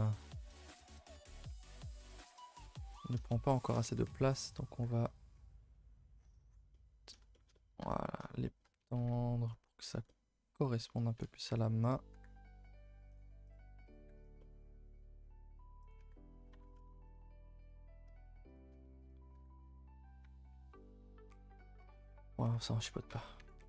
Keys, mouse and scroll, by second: 0.2 g, 1.7 middle click, 2.3 Tab, 2.4 middle click, 3.1 click, 3.6 shift+click, 3.8 middle click, 4.5 click, 4.8 g, 6.7-7.8 middle drag, 7.8 Tab, 8.0-8.6 middle drag, 8.6 scroll up 2, 8.8 a, 9.0 a, 9.1 middle click, 10.0 Tab, 10.1-11.2 middle drag, 11.2 Tab, 11.5 Tab, 11.9 click, 12.1 g, 13.5 click, 13.9 click, 14.0 g, 14.4-15.9 middle drag, 15.9 click, 16.0 g, 17.2 z, 17.7 click, 18.3 shift+click, 18.6 shift+click, 19.1 z, 19.3 g, 20.5 g, 22.0-23.4 middle drag, 23.4 Tab, 23.6 middle drag.